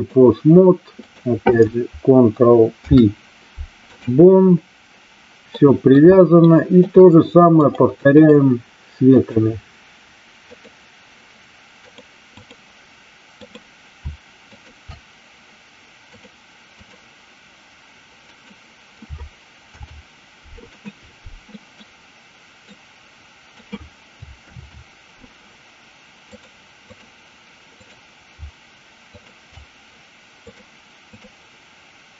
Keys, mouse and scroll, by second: 1.0 click, 5.5 middle click, 6.4-6.8 shift+middle drag, 7.8 click, 9.2 click, 10.4 click, 12.0 click, 13.4 click, 14.5 shift+click, 16.0-16.9 drag, 18.3 click, 21.5 middle click, 22.6 click, 24.4 ctrl+z, 26.3-27.0 drag, 27.6 click, 29.2 shift+click, 30.4 click.